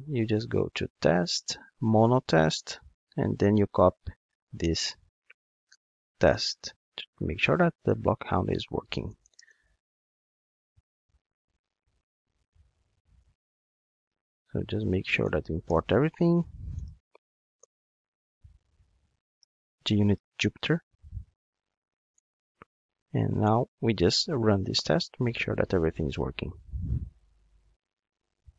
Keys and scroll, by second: 9.5 super+v, 11.3 alt+Return, 22.3 alt+Return, 24.9 ctrl+shift+d.